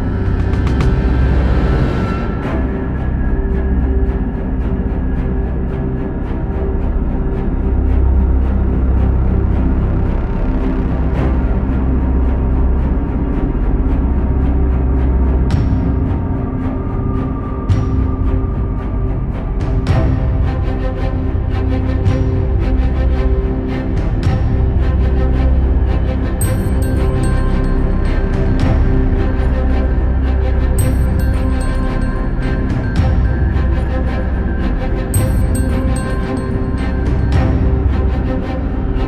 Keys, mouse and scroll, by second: 0.7 shift+z, 2.6 ctrl+KP_1, 3.4 c, 7.1 shift+click, 8.1-8.4 scroll up 1, 8.4 ctrl+z, 8.6 ctrl+z, 9.3 g, 10.5 scroll down 3, 10.7 c, 14.7 KP_1, 18.1 alt+s, 19.8 alt+s, 20.4 Tab, 21.1 click, 21.5-22.8 scroll down 2, 22.8 click, 23.2 scroll down 3, 23.4 shift+middle click, 23.9 g, 25.1 ctrl+KP_7, 25.5 scroll up 2, 25.8 Tab, 26.1-26.6 scroll up 1, 26.6 1, 27.1 click, 27.6 ctrl+KP_Add, 28.0 KP_1, 28.3-28.6 scroll down 3, 28.6-29.2 shift+middle drag, 29.2 e, 32.2-32.6 scroll down 1, 32.6 shift+a, 37.0 ctrl+r, 38.0 shift+z, 38.3 click.